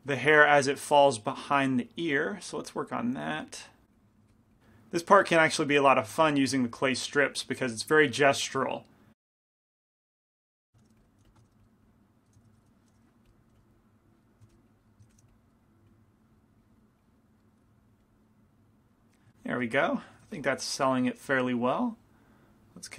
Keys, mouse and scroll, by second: 0.3-2.2 middle drag, 1.1-4.9 drag, 4.3 f, 5.8 f, 6.3 f, 6.9-9.5 drag, 9.3 right click, 10.0-11.2 drag, 10.0 right click, 10.9 shift+f, 11.5 shift+f, 11.9 click, 12.8 ctrl+z, 12.9 shift+f, 13.4-14.5 drag, 13.6 f, 14.5 shift+f, 14.7-17.8 drag, 15.1 shift+f, 17.5-20.0 middle drag, 20.4 f, 21.8-22.9 drag, 21.8-22.9 right drag.